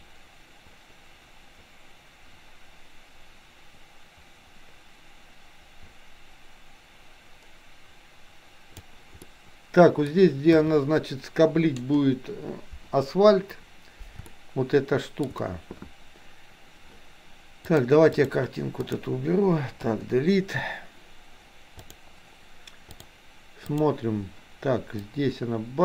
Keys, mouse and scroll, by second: 9.2 middle click, 10.5 KP_3, 14.3-15.2 shift+middle drag, 17.7 click, 20.0 Delete, 22.0 drag, 22.8-24.0 drag, 25.1-25.8 drag.